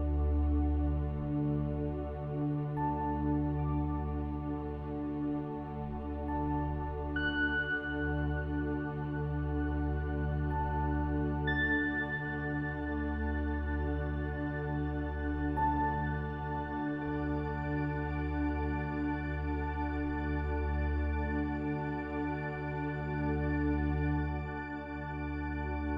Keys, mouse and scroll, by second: 0.8 ctrl+r, 1.8 ctrl+r, 3.5 middle click, 3.7 click, 4.6 click, 5.5 middle click, 6.0 i, 7.2 click, 7.6 s, 8.4 ctrl+z, 9.3 ctrl+b, 12.0 click, 12.6 ctrl+r, 13.7 ctrl+r, 16.1-17.7 drag, 17.3 s, 18.3 ctrl+r, 18.3 click, 18.7 ctrl+r, 20.0 ctrl+r, 21.0-22.0 middle drag, 22.0 ctrl+r, 23.0 ctrl+r, 24.2 click, 24.9 s, 25.3 ctrl+r.